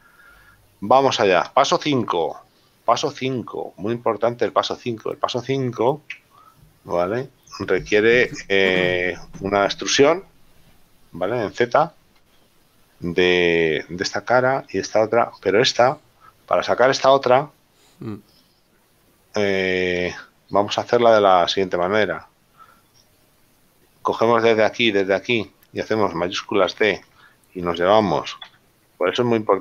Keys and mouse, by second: 1.0 click, 2.3 click, 3.0 shift+middle click, 7.3 middle click, 18.4 right click, 23.1 right click, 28.8 g.